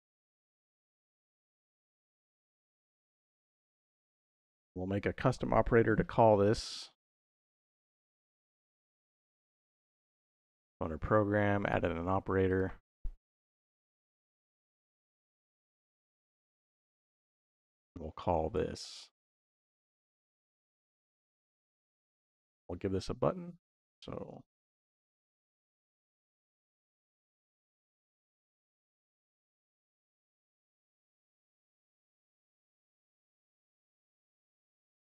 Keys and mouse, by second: 0.7 middle click, 3.4 middle click, 4.2 click, 6.8 shift+a, 13.4 click, 14.7 click, 15.1 click, 17.3-18.4 drag, 20.0-21.3 drag, 21.8 click, 23.4-28.2 drag, 25.6 s, 29.2 middle click, 29.7 click, 30.8 click, 31.3 shift+a, 32.1 t, 34.3-35.0 drag.